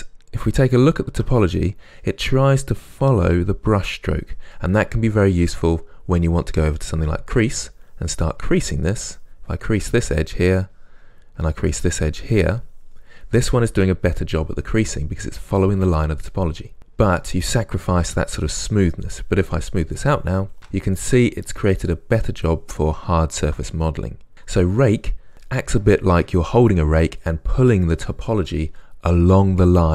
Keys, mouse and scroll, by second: 6.8-23.2 drag, 23.2-29.9 ctrl+middle drag.